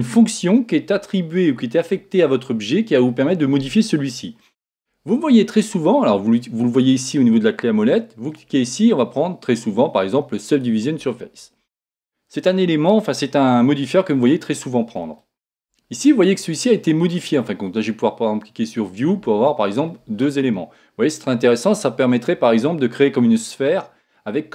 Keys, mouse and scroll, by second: 8.3 click, 13.6-17.0 middle drag, 18.7 click, 20.3-23.1 middle drag, 23.1-24.5 scroll up 1.